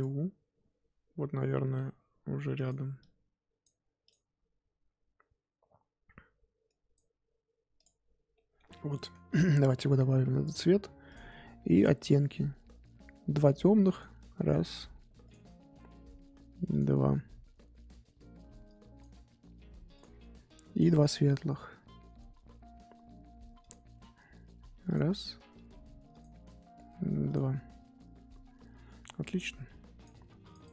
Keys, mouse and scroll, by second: 8.3-10.0 middle drag, 10.0 scroll down 2, 13.9-20.8 drag, 23.6-30.6 drag.